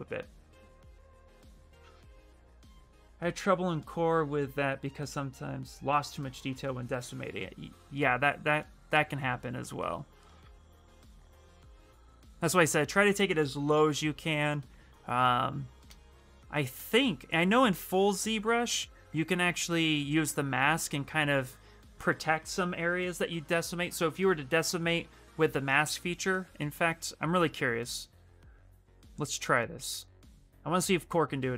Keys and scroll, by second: 29.3 s.